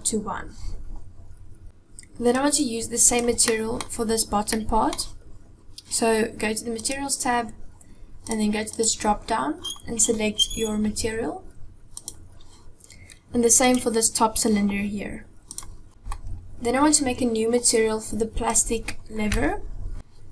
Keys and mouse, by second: 2.2 click, 3.4 middle click, 4.2 middle click, 6.5 click, 8.4-11.9 drag, 13.5 click, 15.3 click, 15.9 middle click, 18.2 click, 19.1-19.9 shift+drag.